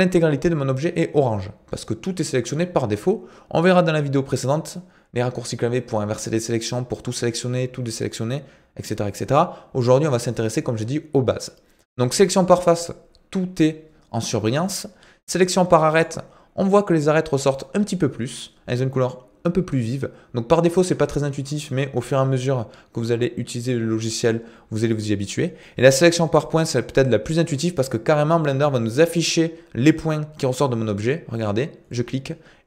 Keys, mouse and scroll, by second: 16.0 click, 31.9 click.